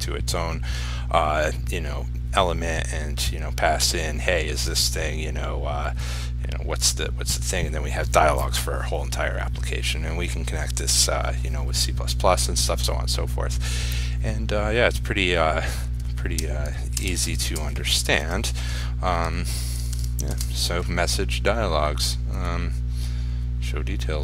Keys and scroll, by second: 20.0 ctrl+s, 20.6 ctrl+r.